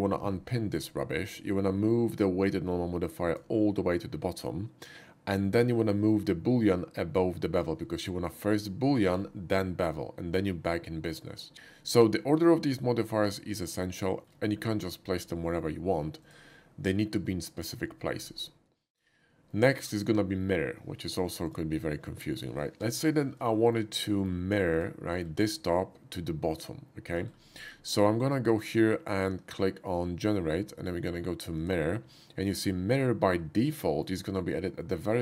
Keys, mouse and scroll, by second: 1.3-3.3 drag, 6.1-9.1 drag, 16.2 shift+click, 18.3 middle click, 18.8 shift+middle click, 19.5-20.1 shift+middle drag, 21.5 shift+click, 22.8 h, 23.6 shift+middle drag, 24.0 shift+middle drag, 24.7 shift+click, 25.1 shift+middle click, 25.7-27.1 shift+middle drag, 27.3-27.7 middle drag, 28.4 click, 31.6 click, 32.6-34.0 middle drag.